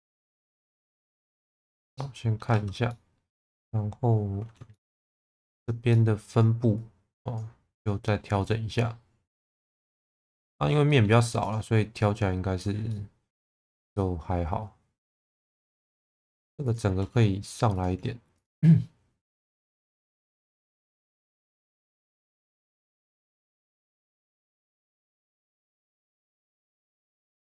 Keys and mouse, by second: 1.4 Tab, 1.7 middle click, 2.5 Tab, 2.9-4.6 middle drag, 4.7 shift+middle click, 5.3 1, 5.9 middle click, 6.8 click, 8.4 click, 9.6 middle click, 10.5 shift+middle click, 10.9 middle click, 12.0 click, 12.9 middle click, 13.6 shift+middle click, 13.9-15.0 middle drag, 15.2 shift+middle click, 15.9 2, 17.8 click, 18.4 shift+click, 19.4 shift+v, 20.7 click, 21.6 1, 21.9 click, 22.1 shift+v, 25.4 click, 27.1 click.